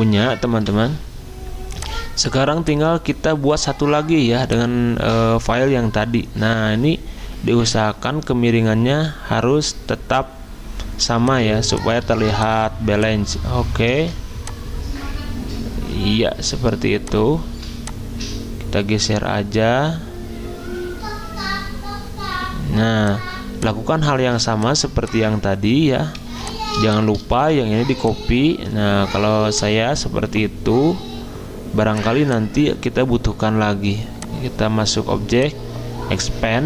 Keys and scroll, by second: 0.5 v, 10.9 z, 12.1 v, 13.9 ctrl+z, 26.3 z, 27.4 v.